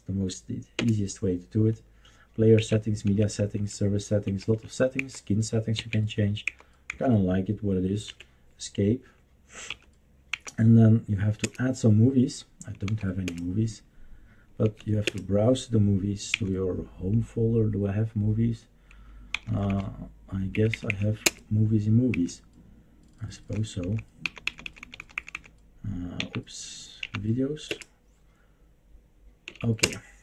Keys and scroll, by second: 0.7 Return, 2.6 Right, 3.0 Right, 3.5 Right, 4.2 Right, 4.5 Right, 4.9 Down, 5.7 Right, 6.4 Down, 6.9 Down, 8.0 Escape, 9.7 Left, 10.3 Down, 11.4 Return, 12.9 Down, 13.2 Return, 14.6 Right, 15.0 Return, 16.4 End, 16.6 Down, 19.3 Down, 19.5-21.2 typing, 22.1 Down, 22.3 Down, 22.8-23.5 Down, 23.8 Down, 24.2 Down, 24.4 Down, 24.6 Down, 24.8 Down, 25.0 Down, 25.2 Down, 25.3 Down, 26.2 Up, 27.0 Up, 27.7 Return, 29.5 Right, 29.8 Return.